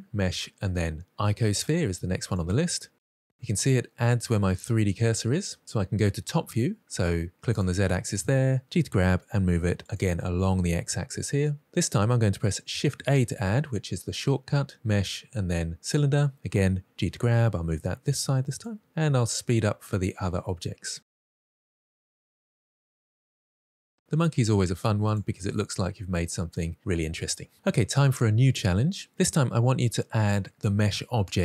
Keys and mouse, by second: 7.5 click, 8.6 g, 12.8 shift+a, 16.9 g, 19.0 shift+a, 20.1 g, 20.5 click, 20.9 shift+a, 21.9 g, 22.8 shift+a, 23.9 g, 25.0 click, 25.5-26.2 middle drag.